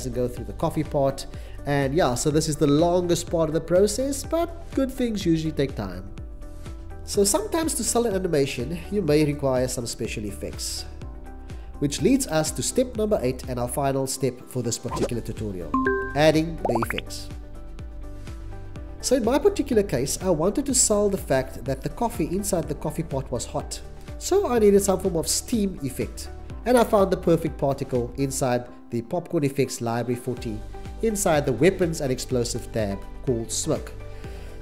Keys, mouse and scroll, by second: 9.1 click, 14.4 click, 15.5 Delete, 24.6 x, 24.9 c, 25.2 x.